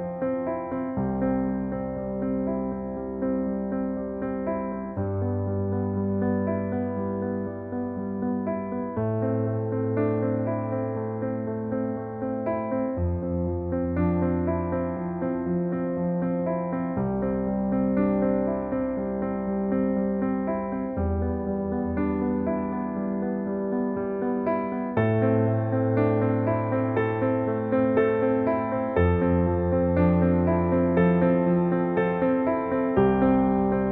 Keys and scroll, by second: 0.0 Return, 0.3 Delete, 0.4 Right, 2.0 ctrl+s, 8.0 -, 8.0 2, 8.1 Return, 8.5 ctrl+s, 9.8 ctrl+s, 13.8 ctrl+s, 32.5 Delete, 32.9 ctrl+s.